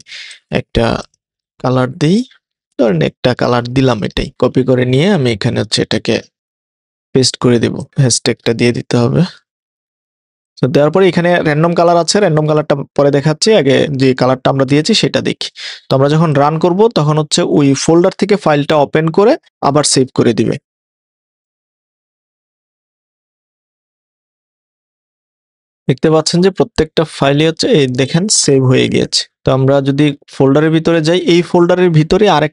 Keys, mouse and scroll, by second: 0.3 0, 1.0 0, 4.3 0, 5.1 0, 6.2 super+a, 6.7 super+v, 7.9 Left, 9.0 #, 13.8 click, 16.3 click.